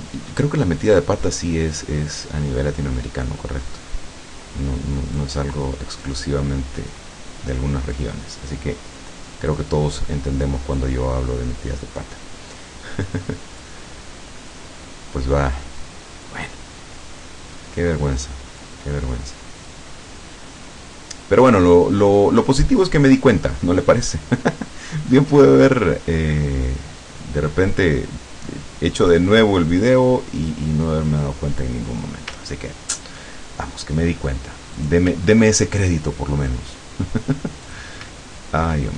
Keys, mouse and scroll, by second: 0.0 click, 1.6-5.4 drag, 6.1-7.2 drag, 8.0-9.8 drag, 10.8-13.8 drag, 14.6-16.5 drag, 17.6-18.8 drag, 19.7-21.2 drag, 25.1 click, 29.0 click, 30.4-32.2 drag, 32.5-33.0 ctrl+scroll down 1, 34.8 click, 35.3-35.8 ctrl+scroll up 2, 36.2-36.7 ctrl+scroll up 2, 37.7 click, 38.5 ctrl+scroll down 2.